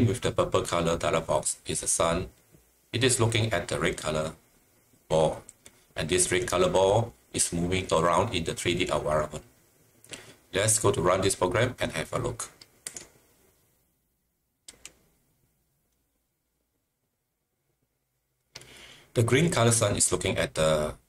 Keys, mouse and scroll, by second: 12.8-14.8 drag.